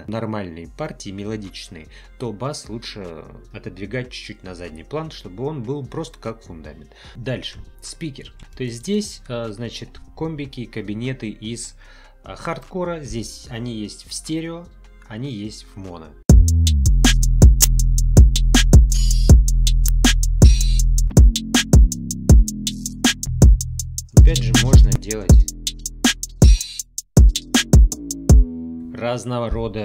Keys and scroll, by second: 7.1 space, 16.2 space, 28.3 space.